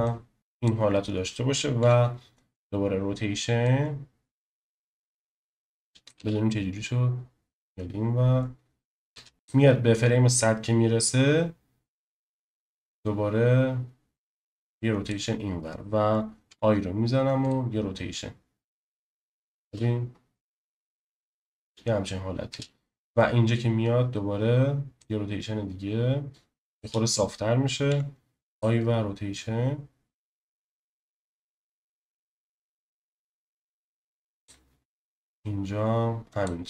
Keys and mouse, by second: 0.1 click, 1.8 i, 3.6-6.1 drag, 6.1 space, 9.3 space, 9.3 click, 12.5 click, 16.5 i, 18.8-19.5 drag, 19.6 space, 22.5 space, 25.0 click, 27.9 i, 30.9-34.5 drag, 35.4 click.